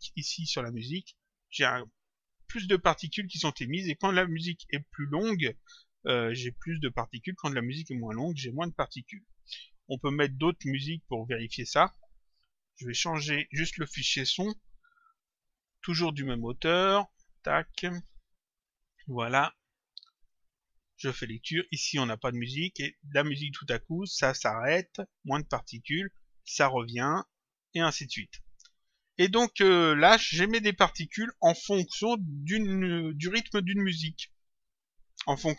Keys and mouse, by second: 10.9 click, 13.1 click, 15.5 click, 20.1 click, 29.2 click.